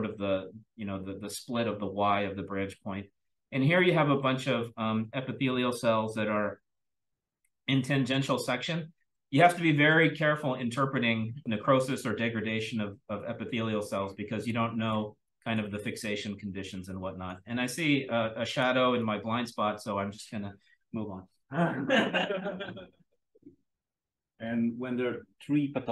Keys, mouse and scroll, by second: 2.9-8.0 scroll up 1, 8.0-8.5 scroll up 1, 8.5-9.5 scroll up 1, 9.5-11.4 scroll up 1, 11.4-12.3 scroll up 1, 12.3-14.4 scroll up 1, 14.4-15.5 drag, 14.4-15.5 scroll down 1, 15.5-16.3 scroll down 1, 16.3-17.2 drag, 16.3-17.2 scroll down 1, 17.2-18.5 scroll down 1, 17.7-18.5 drag, 18.5-19.2 scroll down 1, 19.2-21.8 scroll down 1, 21.8-25.9 scroll down 1.